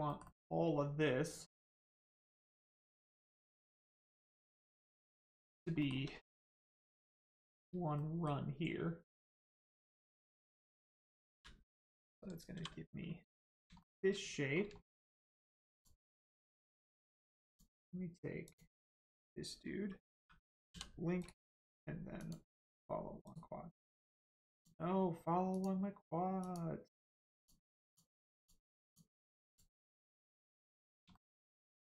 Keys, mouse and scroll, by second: 5.0 shift+middle click, 6.7 shift+click, 7.9 middle click, 10.1 shift+middle click, 10.7 scroll up 1, 12.5 g, 13.5 click, 13.7 shift+middle click, 15.7 middle click, 15.7 click, 18.4 click, 21.1 l, 21.1 right click, 22.1 click, 23.2 right click, 24.5 click, 27.3 click, 29.9 click, 30.7 middle click, 31.1 shift+middle click.